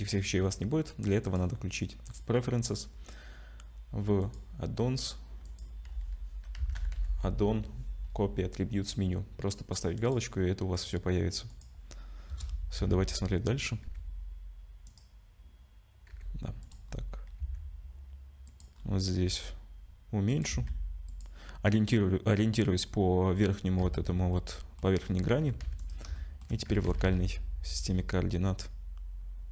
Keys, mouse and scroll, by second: 1.2 click, 10.7 click, 11.5 click, 12.3 KP_0, 12.8 z, 13.8 g, 16.1 g, 16.9-17.4 scroll up 4, 17.4 s, 18.8-19.1 scroll up 2, 19.2 g, 20.5 s, 23.8 z, 24.3 middle click, 25.0-25.4 scroll up 5, 25.4 g, 26.2 shift+middle click, 26.7 g.